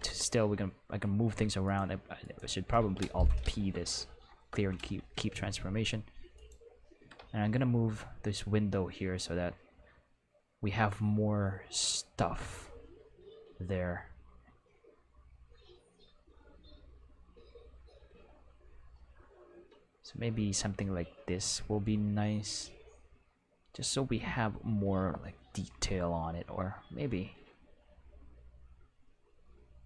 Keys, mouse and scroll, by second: 0.0 x, 1.6 right click, 2.2 right click, 3.4 alt+p, 4.5 Return, 6.3 right click, 7.0 g, 7.1 x.